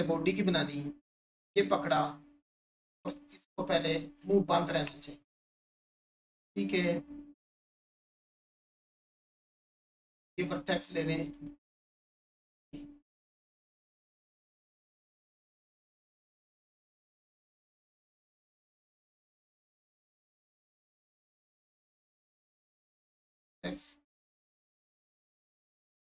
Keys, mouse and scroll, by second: 1.1-1.9 scroll up 1, 3.3 Tab, 3.8 scroll up 1, 4.3-5.8 shift+drag, 10.0 click, 14.9 right click, 18.5-19.9 scroll up 1, 21.4 click, 24.5 right click.